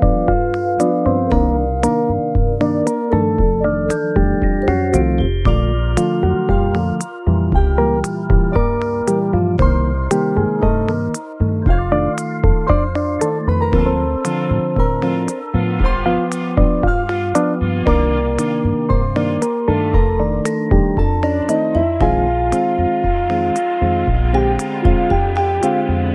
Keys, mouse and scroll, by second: 3.5 middle click, 4.6 scroll down 1, 4.9-5.5 scroll up 3, 5.6-7.1 scroll down 1, 8.8 middle click, 14.4 ., 15.2 5, 15.3 BackSpace, 15.8 5, 16.4 Return, 19.8 ., 20.1 0, 20.4 3, 20.5 Return, 21.5-23.1 scroll up 2, 23.8-24.6 scroll up 10, 26.0-26.1 scroll down 1.